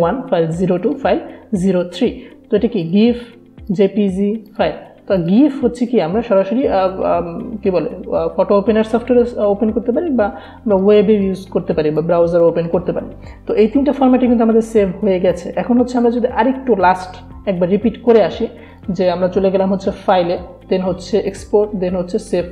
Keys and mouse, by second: 10.7-12.7 drag, 15.4 click, 18.8 click.